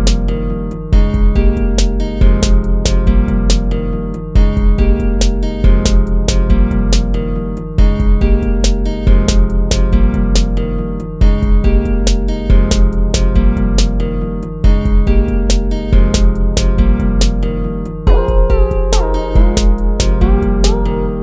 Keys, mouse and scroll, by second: 3.3 ctrl+z, 5.7 ctrl+z, 8.6 ctrl+-, 12.6 ctrl+z, 14.6 ctrl+z, 15.7 ctrl++.